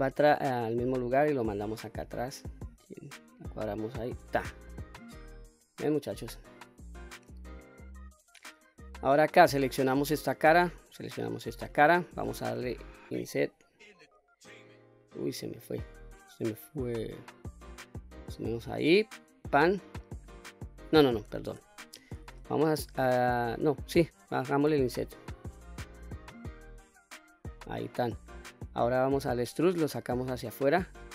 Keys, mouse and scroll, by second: 0.2-4.2 drag, 4.7-5.6 middle drag, 6.0-6.4 scroll up 2, 6.4-8.8 middle drag, 9.4 click, 10.7 shift+click, 11.8 middle click, 12.9 i, 19.4 click, 20.0 middle click, 21.6 ctrl+z, 24.7 i, 27.4 click, 27.9 middle click, 29.0 e.